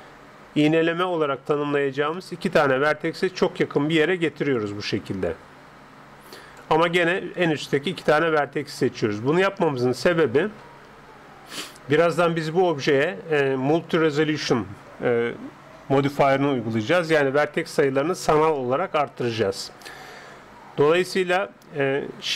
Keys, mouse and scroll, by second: 1.7-4.6 middle drag, 4.6-6.3 drag, 7.5-10.3 right drag.